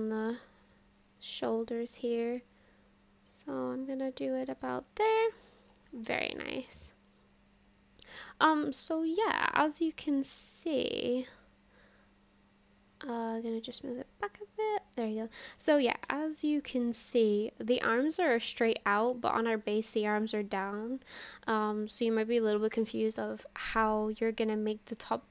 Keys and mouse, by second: 4.9-5.6 drag, 6.2 shift+middle drag, 6.6-9.2 middle drag, 10.5-13.8 drag, 14.1-15.6 middle drag, 16.1-17.4 middle drag.